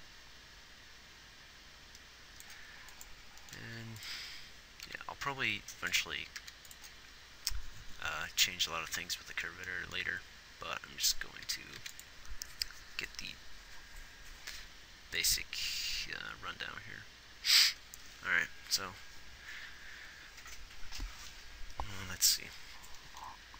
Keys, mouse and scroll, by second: 4.0 a, 6.7 ctrl+s, 12.2 ctrl+s, 16.9 click.